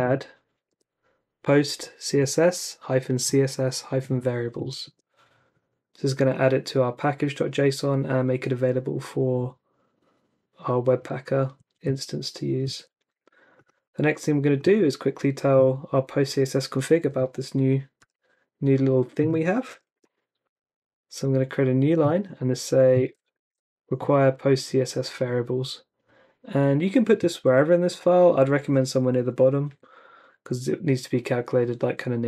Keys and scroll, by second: 0.0-2.5 typing, 4.8 Return, 11.7 super+Tab, 12.6 super+Tab, 18.0 t, 19.5-20.4 typing, 23.0 super+v, 23.4 super+s.